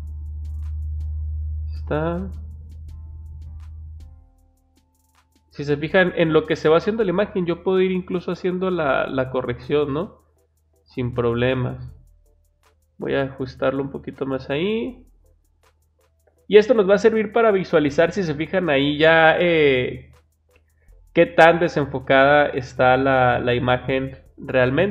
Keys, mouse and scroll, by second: 4.3-6.4 drag, 9.4-11.9 drag, 12.2 click.